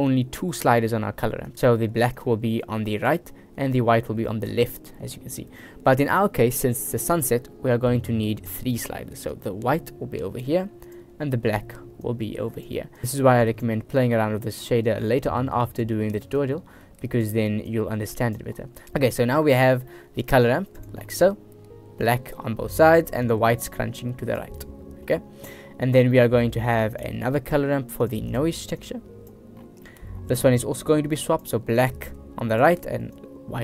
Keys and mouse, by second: 0.2 click, 2.2-3.2 drag, 3.8-4.2 drag, 4.6 middle click, 4.8 click, 5.9 shift+click, 9.4-10.5 drag, 10.9-11.3 drag, 12.1-12.8 drag, 13.0 click, 14.1-15.9 drag, 16.5 click, 17.8 click, 18.9 middle click, 19.3 shift+click, 19.7 shift+middle drag, 20.0 middle click, 20.5 click, 22.1 click, 23.3-24.5 drag, 24.6 middle click, 26.2 middle click, 26.8 shift+a, 28.9-29.4 drag, 29.9 click, 30.8-31.5 drag, 31.9-32.4 drag, 33.2-33.6 drag.